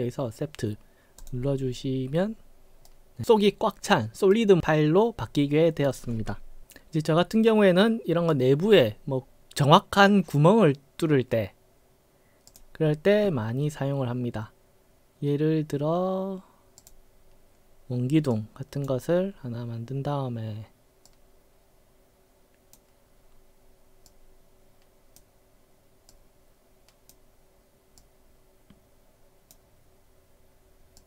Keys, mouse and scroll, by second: 1.3 click, 2.9-3.2 right drag, 4.4-5.9 right drag, 7.1-8.4 right drag, 12.5 click, 16.9 click, 18.4 click, 18.6-18.9 right drag, 21.1-22.8 drag, 24.1-25.2 drag, 26.1-27.2 drag, 28.1-29.6 drag.